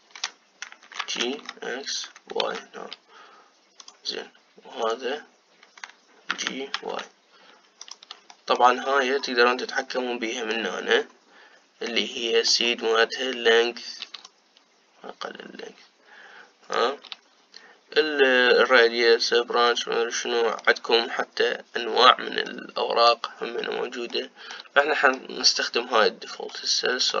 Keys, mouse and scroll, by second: 0.0 click, 1.8 g, 5.5 click, 7.0 g, 9.0 shift+middle click, 9.6-10.5 scroll up 4, 10.5-11.9 middle drag, 11.9-12.5 scroll up 3, 12.5-15.0 middle drag, 15.0-20.4 shift+drag, 20.4-24.1 middle drag, 24.1-24.8 scroll up 1, 24.8-26.2 shift+middle drag, 26.2-27.2 scroll down 2.